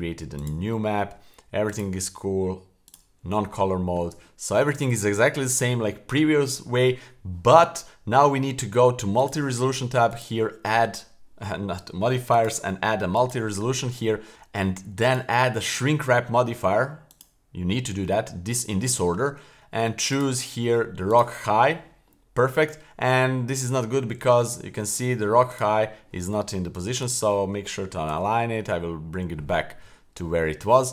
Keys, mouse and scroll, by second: 1.7-2.9 drag, 4.3 shift+middle click, 9.2 click, 11.8 click, 13.3 click, 14.2 middle click, 17.2 click, 17.9-20.1 scroll down 2, 20.1-21.3 drag, 22.4 scroll up 2, 22.6-23.1 scroll down 2, 23.3-24.1 scroll up 2, 24.2 super+z, 25.5 click, 25.8-26.4 scroll down 2, 27.0 right click, 28.1 alt+g, 29.0-30.0 scroll up 1.